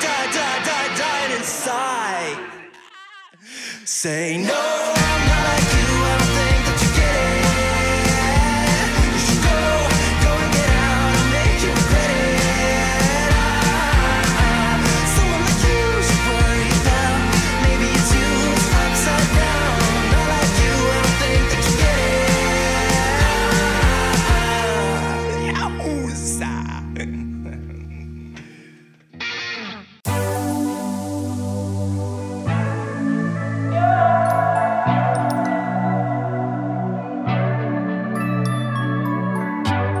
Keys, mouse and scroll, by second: 3.1 right click, 5.8 click, 11.5 click, 13.8-16.0 typing, 18.5-23.3 drag, 26.1 click, 33.6-35.1 typing, 36.1-40.0 drag.